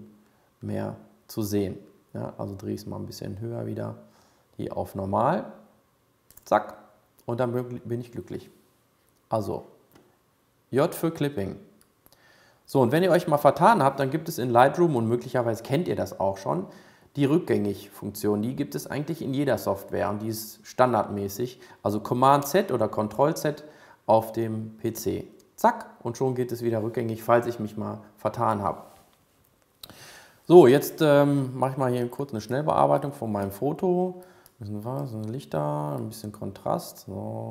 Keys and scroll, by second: 25.2 super+z.